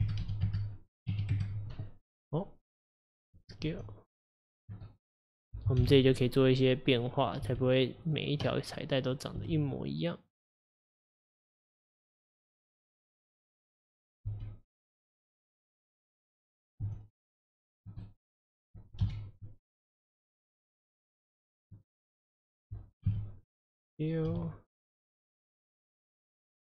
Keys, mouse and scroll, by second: 3.7 s, 4.9 middle click, 5.8 KP_1, 6.9 click, 7.5 g, 9.1 click, 9.4 g, 11.3 click, 12.3 click, 13.6 click, 14.3 g, 15.6 click, 16.9 s, 18.1-19.1 middle drag, 19.1 KP_1, 20.7 click, 22.4 middle click, 23.1 KP_3, 24.3 s, 26.0 click, 26.4 middle click.